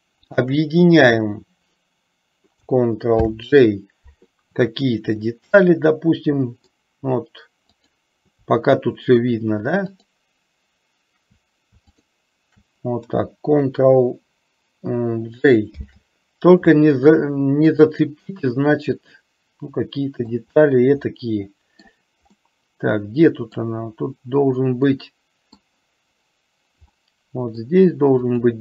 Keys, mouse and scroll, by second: 0.3 shift+click, 3.3 ctrl+j, 5.4-6.9 middle drag, 7.9 click, 10.1 shift+click, 15.9 ctrl+j, 17.8 click, 18.9-20.5 middle drag, 21.3 middle click, 22.8-24.0 middle drag, 25.2 middle click, 27.0 middle click, 28.5 click.